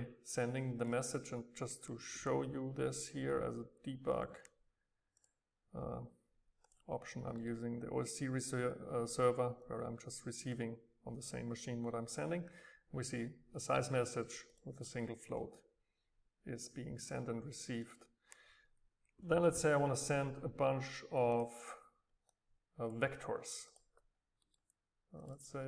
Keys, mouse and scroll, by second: 0.2-0.7 scroll up 2, 0.8-2.9 drag, 5.2-7.4 drag, 9.7-12.1 drag, 14.5-16.7 drag, 17.9-20.0 drag, 21.4-24.4 drag, 22.3 scroll up 2, 22.5 scroll down 2, 24.4 middle click, 25.2 click.